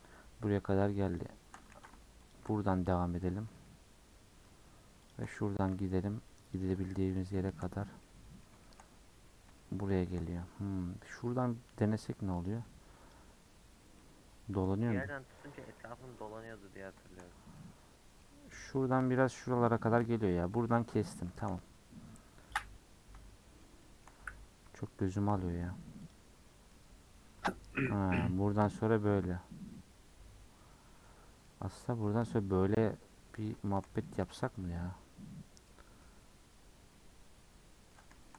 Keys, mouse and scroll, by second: 1.0 alt+shift+click, 1.7 ctrl+z, 2.2 alt+shift+click, 2.7-5.0 middle drag, 5.0 alt+shift+click, 6.4 alt+shift+click, 6.8 middle click, 7.7-8.0 scroll up 1, 8.0 middle click, 8.9-9.5 scroll up 2, 9.5 shift+middle click, 10.4-10.9 scroll down 1, 10.9-11.9 scroll up 1, 11.9 alt+click, 12.3 alt+click, 13.0 alt+click, 13.4-14.0 scroll down 7, 14.0-15.4 middle drag, 15.4-15.8 scroll up 4, 15.8 middle click, 16.3 scroll up 1, 16.4 middle click, 17.2-17.5 scroll up 3, 17.5-18.6 middle drag, 18.6-18.9 scroll down 2, 18.9 shift+middle click, 20.1 scroll down 3, 20.3 middle click, 21.6-22.4 scroll up 6, 22.4 middle click, 23.8 shift+middle click, 24.2-24.7 scroll up 1, 24.7-26.0 shift+middle drag, 26.0 alt+click, 26.3-26.7 scroll down 6, 26.7-29.7 middle drag, 31.7 middle click, 32.1-32.6 scroll up 2, 32.6-34.4 middle drag, 34.4 Tab, 34.7-35.8 middle drag, 35.8 Tab, 36.0-38.3 middle drag, 38.3 scroll down 1.